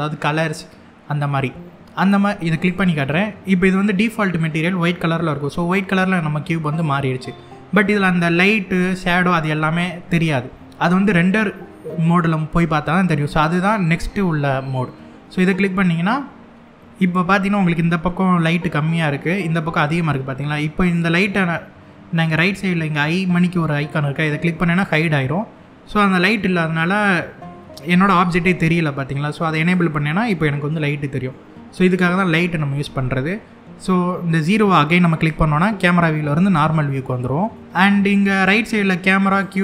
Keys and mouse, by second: 2.2 click, 24.5 click, 29.3 click, 34.9 KP_0, 37.2-37.6 middle drag, 38.9 click, 39.4 click.